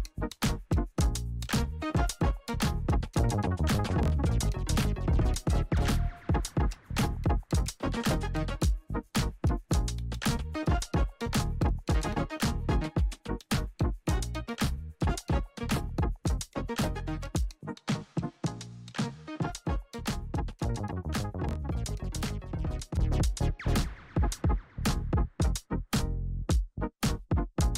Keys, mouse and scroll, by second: 6.8 click, 10.1 Return, 11.6-27.7 drag.